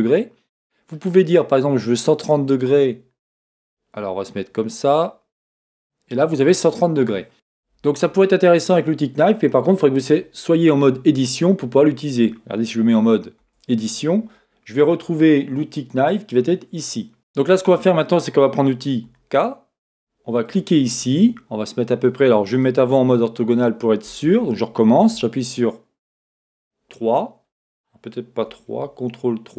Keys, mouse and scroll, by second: 13.4 Tab, 17.2-24.4 middle drag, 19.0 k, 24.4 Escape, 25.1 KP_1, 26.2 KP_3, 28.7 ctrl+KP_3.